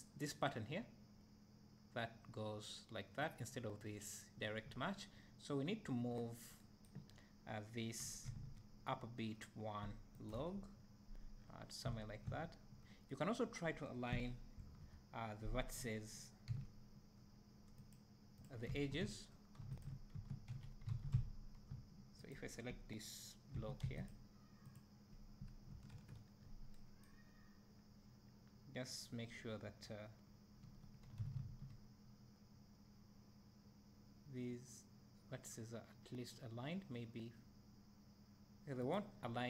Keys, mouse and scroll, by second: 15.3 e, 18.0 click, 18.7 `, 19.9 shift+click, 20.2 Tab, 20.9 alt+a, 21.2 `, 22.3 click, 23.9 3, 24.1 click, 28.3 e, 39.2 middle click.